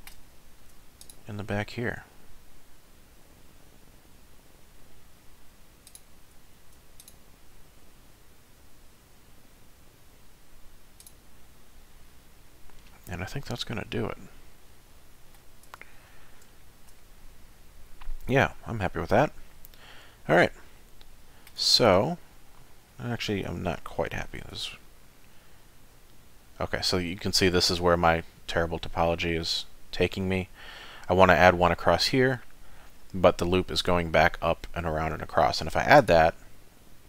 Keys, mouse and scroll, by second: 0.6 ctrl+r, 6.6 ctrl+r, 11.4 middle click, 15.7 Tab, 16.1-16.4 scroll down 3, 16.6 shift+middle click, 17.0 middle click, 21.6 Tab, 21.9-22.9 scroll up 4, 22.9 middle click, 24.4 ctrl+r.